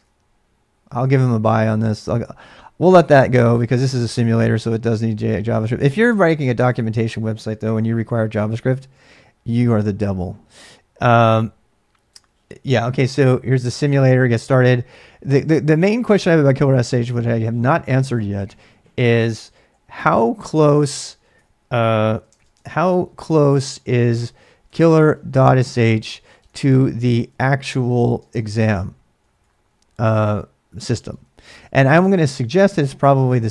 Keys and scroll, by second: 3.5 typing, 7.7 alt+Tab, 19.6 ctrl+a, 20.0 ctrl+a, 20.7 typing, 22.1-32.1 typing, 33.3-33.5 typing.